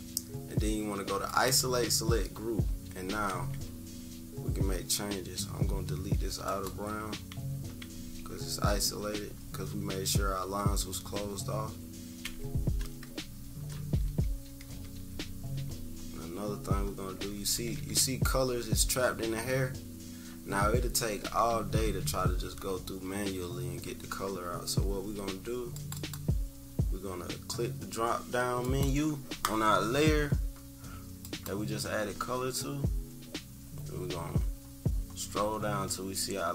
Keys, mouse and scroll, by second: 1.2-3.1 drag, 3.2 Delete, 6.4-8.5 drag, 12.2 Delete, 13.7 -, 14.2 =, 14.4 =, 14.7 =, 15.4 scroll down 2, 15.8 -, 15.9 scroll down 2, 16.4-16.9 scroll up 2, 17.1 scroll down 2, 17.2 =, 17.5 =, 17.7 =, 17.8 scroll up 2, 20.9 =, 21.1 scroll up 2, 21.2 click, 21.2 =, 21.4 click, 21.4 =, 23.9 -, 24.2 -, 24.4 -, 24.7 -, 25.7 click, 25.9 click, 28.6-29.8 drag, 31.2 click, 32.5 scroll down 1, 33.0-36.5 scroll down 6.